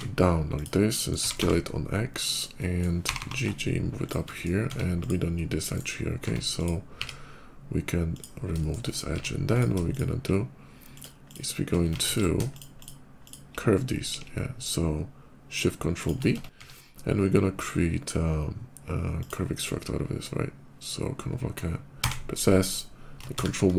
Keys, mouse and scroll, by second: 0.4 click, 0.8 middle click, 1.0 s, 1.2 x, 2.1 click, 2.4 middle click, 2.9 g, 3.2 g, 3.4 g, 4.1 shift+middle click, 4.5 Tab, 4.8 click, 5.6 right click, 6.4 click, 6.6 x, 7.8 click, 8.4 shift+middle click, 8.7 shift+middle click, 9.3 Tab, 9.3 click, 9.7 shift+click, 10.8 shift+click, 11.1 shift+click, 12.0 ctrl+z, 12.4 shift+click, 12.6 shift+click, 13.1 shift+click, 15.8 shift+click, 16.1 Tab, 16.4 q, 16.6 Tab, 19.0 click, 21.9 s, 22.5 click, 23.2 ctrl+1.